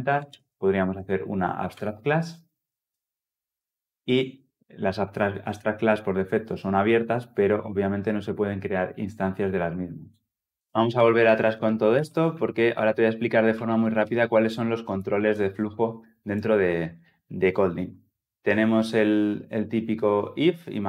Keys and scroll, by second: 2.7 Return, 10.8 ctrl+z, 11.4 ctrl+z, 12.1 ctrl+z, 12.8 ctrl+z, 13.7 ctrl+z.